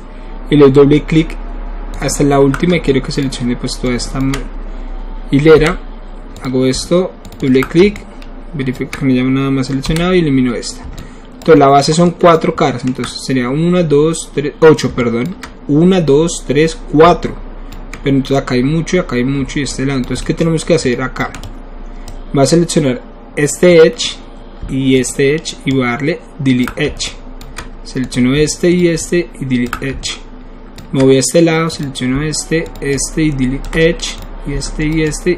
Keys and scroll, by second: 5.5 Delete, 9.8 Delete.